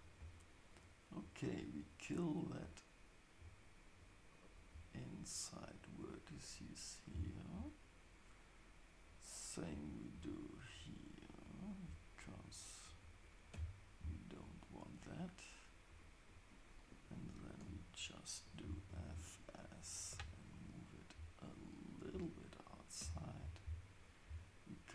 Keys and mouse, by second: 0.7-4.8 shift+drag, 5.4-7.7 shift+drag, 7.1 x, 9.9 click, 10.6-11.9 shift+drag, 12.4-14.1 shift+drag, 13.5 x, 15.9 click, 17.0 shift+click, 17.6 f, 18.9 ctrl+shift+s, 19.9 click, 20.1 g, 23.0 x.